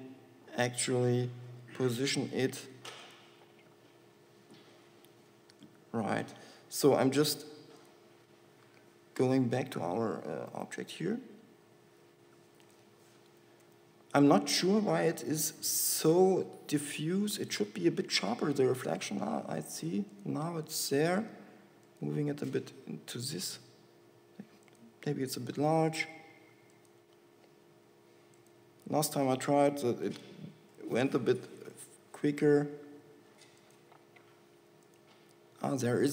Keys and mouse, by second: 2.7 s, 15.7-17.4 drag, 16.3 g, 19.2 g, 21.4 g, 23.8 s, 26.3 g, 28.1 g, 29.3 s, 30.9 g, 33.2 g, 34.5 g.